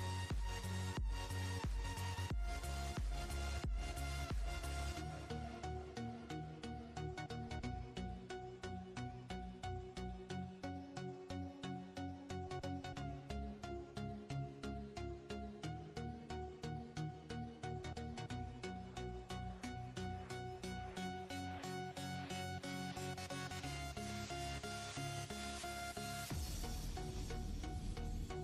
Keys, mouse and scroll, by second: 0.5 scroll up 8, 1.4-2.9 drag, 2.9-4.9 scroll up 5, 5.6 ctrl+z, 9.2 Tab, 13.5-15.6 scroll down 5, 17.7 drag, 18.5 click, 19.4 click, 25.7 shift+a.